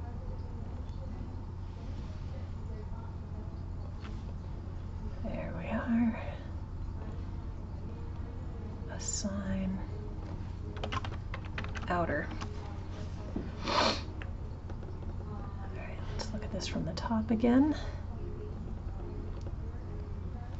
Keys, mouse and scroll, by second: 0.3 ctrl+click, 1.7 ctrl+click, 3.3 ctrl+click, 6.5-9.7 drag, 9.9-12.9 drag, 14.2-17.2 middle drag, 17.3 click, 19.4 click.